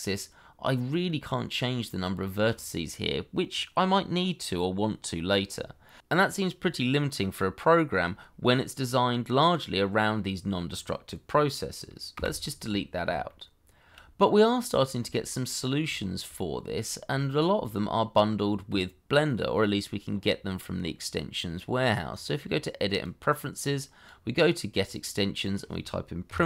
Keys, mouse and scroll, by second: 0.7 middle click, 5.9 middle click, 7.0-7.4 scroll down 1, 7.5 shift+middle click, 12.1 Delete, 13.2 shift+middle click, 14.1-14.4 scroll up 1, 14.4 middle click, 15.1 shift+middle click, 15.4-15.9 shift+scroll up 1, 15.9 shift+middle click, 26.2 p, 26.4 r.